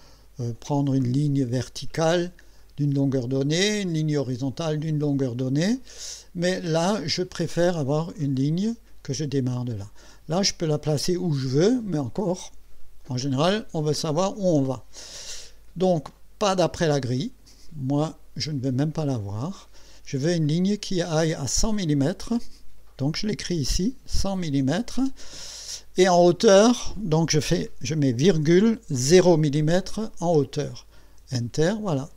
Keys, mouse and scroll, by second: 0.5 Escape, 2.2 click, 4.2 click, 7.5 click, 9.3 click, 17.5 click, 19.2 click, 22.0 click, 23.5 KP_1, 24.2 KP_0, 28.3 ,, 29.1 KP_0, 31.2 Return.